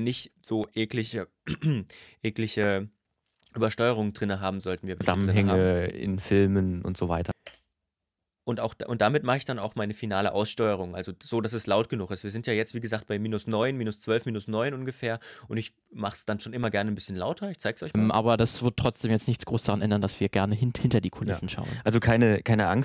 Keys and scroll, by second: 4.7 space, 7.1 space, 17.7 space.